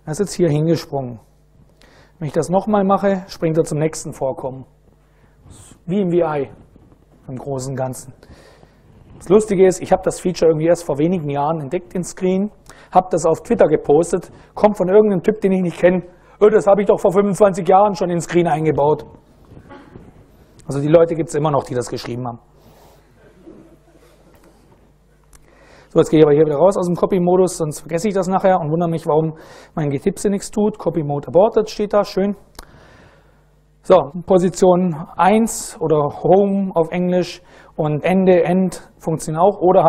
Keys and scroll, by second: 2.8 /, 3.3 Return, 26.2 super+Right, 27.2 Escape.